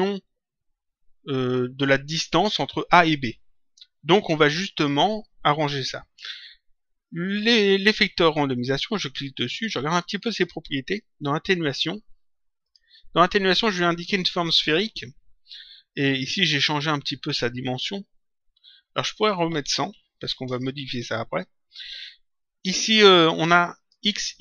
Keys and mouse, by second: 9.3 click, 12.6 click, 18.9 click, 21.0 Return, 23.7 click.